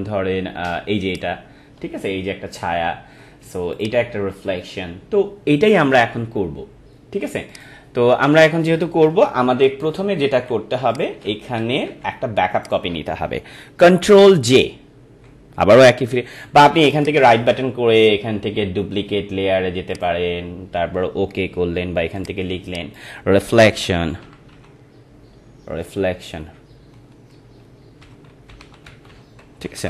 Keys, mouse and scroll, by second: 1.1 click, 3.0-3.5 scroll down 1, 3.8 click, 7.5 click, 9.8 ctrl+-, 10.9 click, 11.2 ctrl+=, 11.6 ctrl+-, 12.6 click, 16.9 right click, 19.9 click, 23.5-25.0 typing, 26.1 BackSpace, 27.8-29.8 typing.